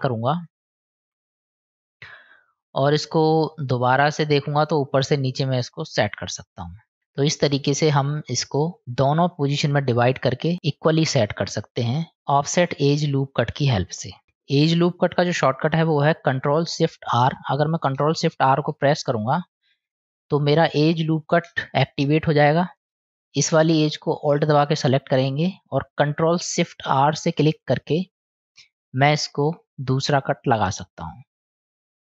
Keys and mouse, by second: 0.6-5.8 drag, 7.0-9.6 middle drag, 10.5-11.9 middle drag, 16.5 middle click, 19.0 ctrl+shift+r, 22.5 ctrl+shift+r, 24.5 alt+click, 25.5 middle click, 27.6 ctrl+shift+r.